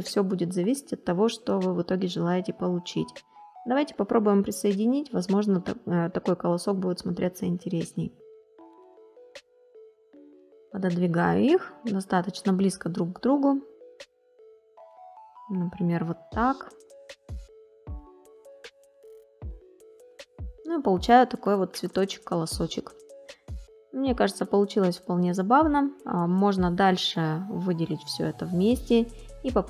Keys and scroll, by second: 20.5 space.